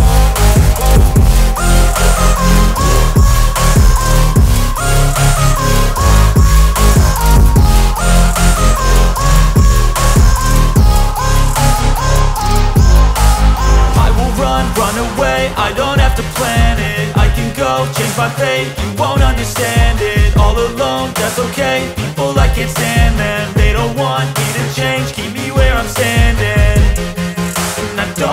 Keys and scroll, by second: 20.5 space, 21.9 c, 25.5 Escape.